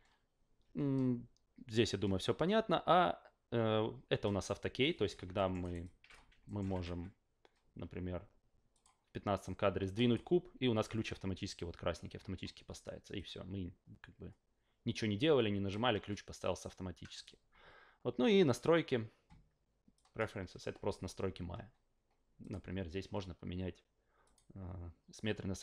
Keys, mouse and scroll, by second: 5.3 alt+middle drag, 5.6 alt+right drag, 5.8 alt+click, 6.4 alt+middle drag, 6.7 w, 8.7 click, 9.9 drag, 13.1-15.7 drag, 18.4 click, 19.9 drag, 22.4 click, 24.2 click.